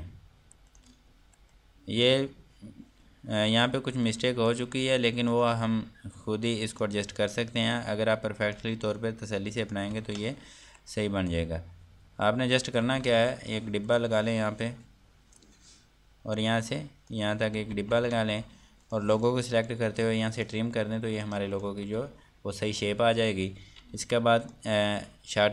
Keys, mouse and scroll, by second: 1.8 F2, 2.1 click, 4.1 F3, 4.6 click, 5.2 F2, 5.5 click, 6.1 Escape, 7.3 click, 10.2 ctrl+click, 10.5 ctrl+space, 10.9 scroll down 1, 11.2 F2, 11.5 click, 13.9 Delete, 14.4 click, 18.3 ctrl+space, 19.4 click, 20.9 click, 22.3 Delete, 25.0 click.